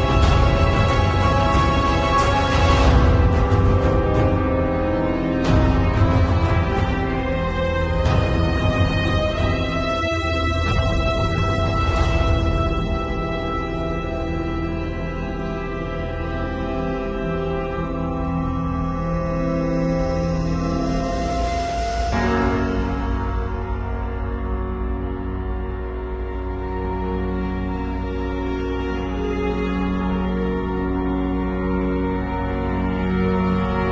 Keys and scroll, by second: 5.6 [, 6.1 ], 6.9 [, 8.1 ], 8.9 [, 9.5 ], 10.1 [, 11.5 x, 12.2 x, 15.0-16.4 typing, 21.6-25.1 typing, 27.7 x.